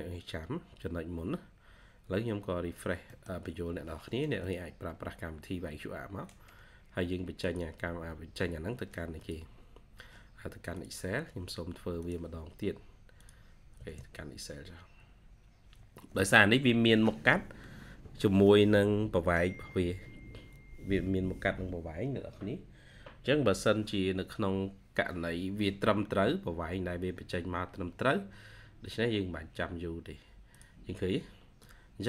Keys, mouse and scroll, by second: 3.0 middle click, 13.6 space, 25.3-25.8 scroll down 1, 27.0-28.4 scroll up 1, 28.5 ctrl+scroll up 1.